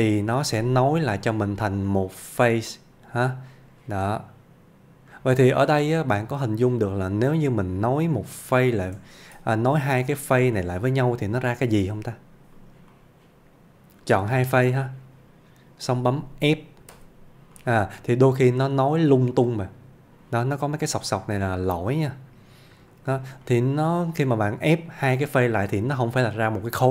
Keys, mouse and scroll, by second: 1.1 alt+z, 1.3 middle click, 5.4-5.7 scroll down 1, 6.5 click, 8.0 scroll down 1, 8.4-9.0 middle click, 9.2 shift+d, 9.8 middle click, 10.2 click, 10.6-11.2 middle click, 11.1 scroll up 1, 12.1 g, 12.6 click, 12.9-14.2 middle click, 14.5 shift+click, 15.4 scroll up 1, 17.0 f, 17.6-20.4 middle click, 20.6-21.0 scroll up 1, 21.4-23.0 middle click, 23.1 scroll down 1, 23.5 middle click, 25.5 ctrl+z.